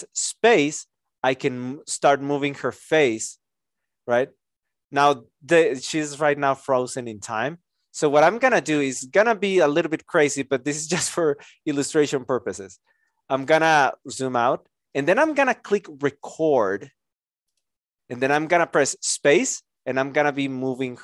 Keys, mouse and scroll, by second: 11.2 alt+click, 12.6 alt+click, 14.0 alt+right click.